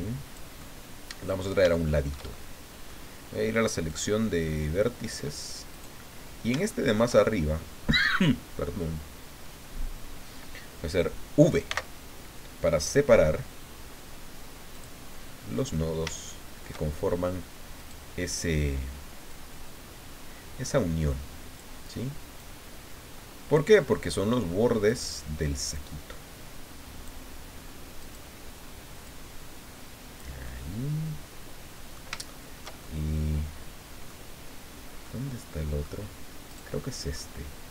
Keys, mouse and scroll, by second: 0.6 middle click, 1.6 shift+scroll up 2, 1.7-3.1 shift+middle drag, 3.9 click, 4.5-4.9 scroll up 2, 5.7 right click, 6.1 scroll down 2, 6.7 shift+middle click, 11.7 v, 14.7 click, 15.1-15.6 scroll up 2, 15.7 middle click, 17.8 right click, 19.3-21.8 drag, 22.4-23.7 drag, 24.9 right click, 25.7-27.3 drag, 28.0 right click, 29.0-30.4 drag, 30.4-34.2 middle drag, 35.0 middle click, 36.5 right click, 36.8 middle click.